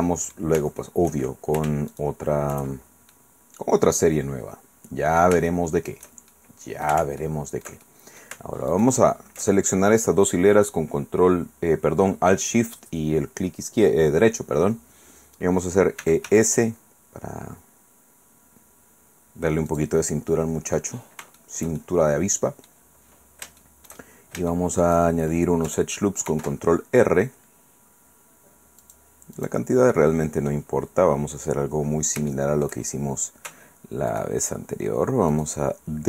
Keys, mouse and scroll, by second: 0.8 shift+middle click, 1.9 alt+shift+middle click, 3.1-5.4 middle drag, 5.5 shift+middle click, 6.5 click, 7.8 alt+shift+click, 8.7 alt+shift+right click, 16.0 e, 16.3 s, 19.7 click, 20.1 click, 21.4-22.9 shift+middle drag, 23.1 scroll down 1, 23.2-23.6 scroll up 1, 23.6 shift+middle click, 24.1-24.5 shift+scroll up 1, 24.5-26.8 shift+middle drag, 26.3 ctrl+r, 26.8-27.6 ctrl+scroll up 1, 27.6 middle click, 28.2-28.8 scroll up 1, 28.8 click, 29.3-30.5 drag, 30.5-31.1 scroll up 1, 31.1-32.1 scroll down 1, 32.3 shift+click, 32.8-34.4 shift+middle drag, 34.1 alt+shift+right click, 35.3 alt+shift+right click, 35.6 alt+shift+middle click.